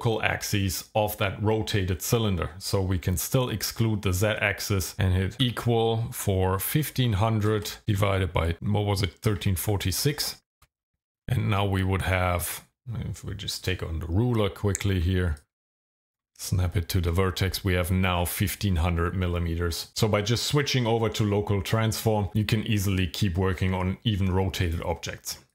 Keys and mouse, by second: 5.3 =, 6.7 KP_1, 7.0 KP_5, 7.5 KP_0, 7.7 KP_0, 8.0 KP_Divide, 9.4 KP_1, 9.6 KP_3, 10.0 KP_4, 10.2 KP_6, 10.6 KP_Enter, 15.4 ctrl+click, 16.4 shift+middle click, 24.7 click.